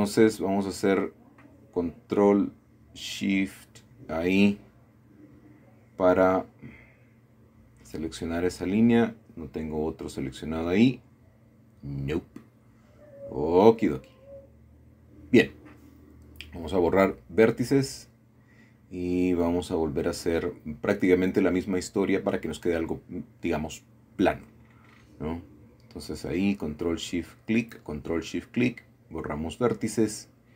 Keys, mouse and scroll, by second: 0.7 alt+shift+click, 1.8-2.1 typing, 2.7 alt+shift+click, 3.8-4.3 scroll down 1, 6.0 middle click, 6.5 middle click, 7.5-8.1 scroll down 1, 8.1 shift+middle click, 9.7-11.3 scroll down 2, 9.8 middle click, 11.3-12.5 shift+middle drag, 12.2-12.9 scroll up 1, 15.9 x, 17.3 click, 18.9 middle click, 19.2-19.5 scroll up 1, 19.5 scroll down 1, 19.6 middle click, 19.9-21.3 scroll up 3, 21.9 middle click, 22.2-22.6 scroll down 2, 23.7 middle click, 25.9 alt+shift+click, 27.0 alt+shift+click, 28.4 x, 28.9 click, 29.8-30.5 scroll down 3.